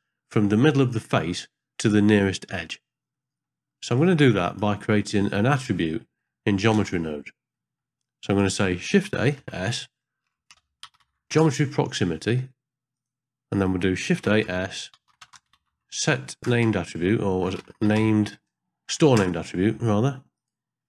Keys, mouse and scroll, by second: 3.1 middle click, 3.9-4.6 drag, 5.1 click, 6.0 middle click, 6.3-6.6 scroll up 1, 6.8 ctrl+space, 7.6 middle click, 8.3 click, 9.0 shift+a, 13.5 click, 14.2 shift+a, 16.6 BackSpace.